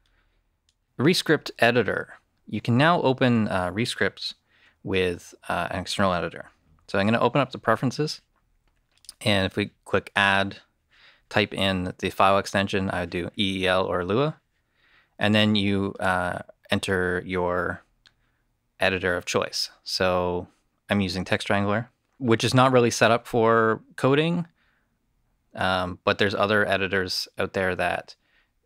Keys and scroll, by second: 6.9 super+,.